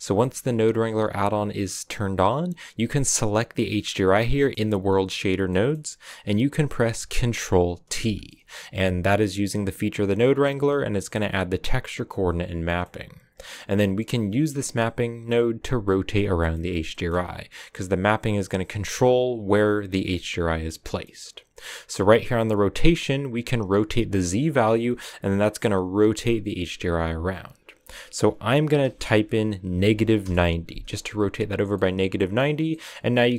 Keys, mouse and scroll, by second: 0.0 click, 7.8 ctrl+t, 8.6 middle click, 8.7 a, 14.8 click, 23.4-24.5 drag, 30.1-31.7 drag, 31.7 middle click, 32.4 scroll up 3, 32.6 middle click, 33.2-33.3 scroll up 1.